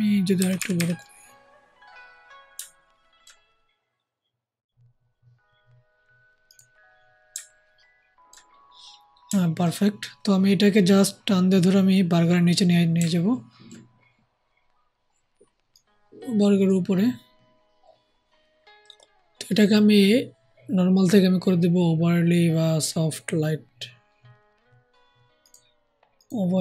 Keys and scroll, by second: 0.3 ], 0.5 ], 0.7 ].